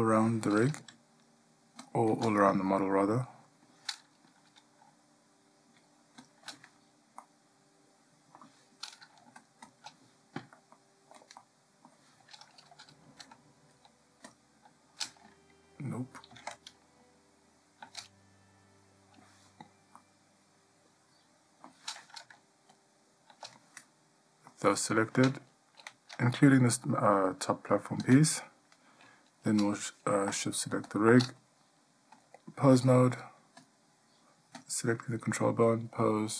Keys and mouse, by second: 2.0 shift+click, 3.3 middle drag, 7.4-8.6 middle drag, 9.6 shift+click, 9.8 shift+click, 10.9-11.4 ctrl+middle drag, 11.6-12.1 middle drag, 16.5 ctrl+z, 16.5 ctrl+x, 20.2-21.8 middle drag, 24.7-25.2 middle drag, 32.4-33.0 drag, 33.8-34.4 drag, 36.0-36.3 drag.